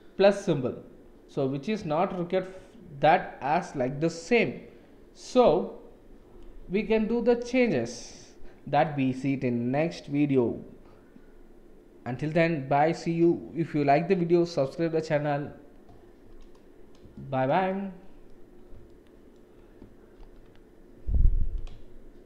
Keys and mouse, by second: 17.1-17.4 shift+middle drag, 17.6-18.3 middle drag, 18.8-19.3 shift+drag, 20.2 ctrl+s.